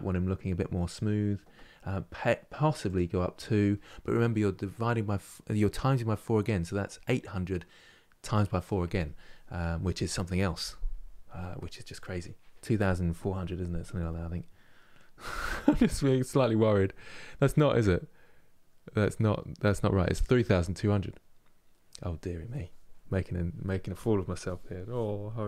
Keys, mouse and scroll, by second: 0.6 scroll down 1, 2.6-5.6 drag, 13.5-16.5 middle drag.